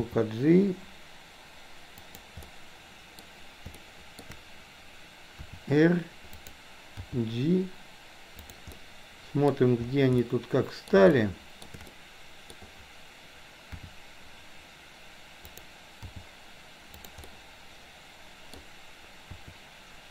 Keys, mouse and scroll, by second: 0.0 g, 2.5 middle click, 3.9 shift+middle click, 5.4 r, 7.0 g, 8.9-9.5 middle drag, 10.4-11.0 middle drag, 11.1-11.6 shift+middle drag, 12.0 middle click, 13.8 r, 16.0 g, 17.3-18.6 middle drag, 19.4 r.